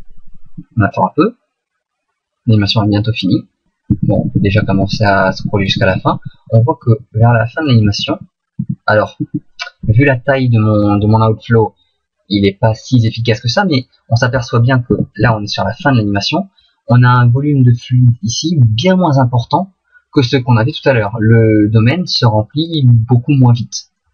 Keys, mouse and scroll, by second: 0.1 Left, 0.3 Left, 0.4 Left, 0.6 Left, 3.9 Right, 4.1 Right, 4.3 Right, 4.5 Right, 4.6 Right, 4.8 Right, 5.3 Right, 5.5 Right, 5.7 Right, 5.9 Right, 6.1 Right, 6.2 Right, 6.3 Right, 6.6 Right, 6.8 Right, 7.1 Right, 7.3 Right, 7.4 Right, 7.6 Right, 7.9 Right, 8.1 Right, 8.6 Right, 9.2 Left, 13.7 middle click, 14.9 Right, 15.2 Right, 16.7 middle click, 20.4 middle click, 23.9 middle click.